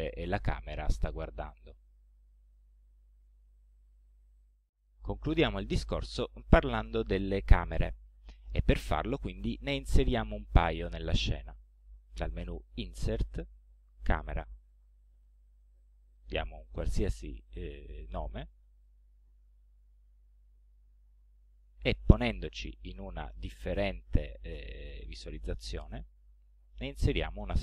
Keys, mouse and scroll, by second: 2.2-2.6 scroll down 2, 2.8-3.3 scroll up 2, 7.2 scroll down 1, 7.7 scroll up 2, 12.8 click, 14.7-17.3 drag, 18.9 middle click, 19.6-20.7 scroll down 3, 21.0 scroll down 1, 21.5 right click, 22.3 scroll up 1, 22.9 scroll up 1, 23.5 middle click, 24.4 scroll down 1, 25.2 right click, 27.1 click.